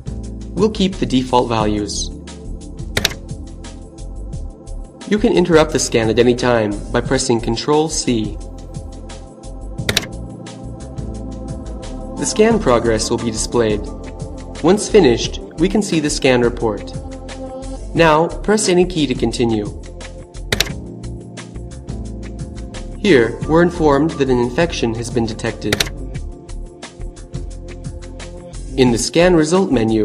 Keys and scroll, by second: 2.0 Return, 8.4 Return, 19.6 space, 24.2 Return.